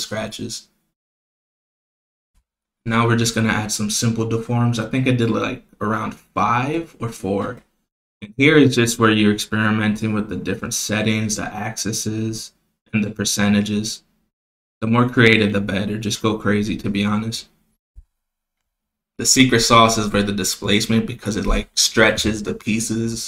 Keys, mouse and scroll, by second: 0.0 click, 1.7 click, 2.7-4.7 drag, 5.5-6.5 drag, 7.5 click, 10.2 click, 11.2 click, 11.8 click, 12.5-14.5 drag, 15.0 click, 16.7 click, 18.6-19.8 drag, 20.7-21.5 drag, 22.5 click, 22.8 click.